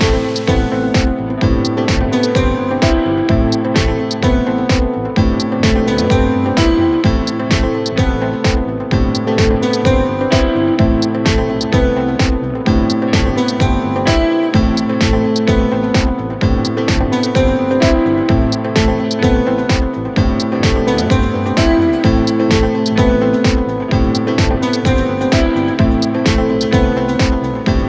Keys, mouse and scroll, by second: 17.6-19.9 middle drag, 19.9-26.6 drag.